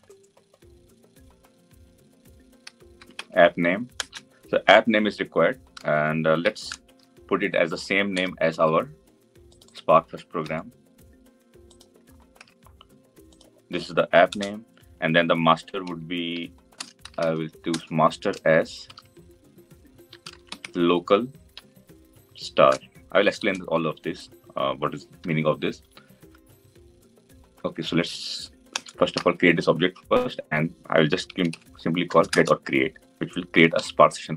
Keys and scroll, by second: 3.8 Return, 10.2 ctrl+c, 12.1 ctrl+v, 17.5 Return, 32.0 Return.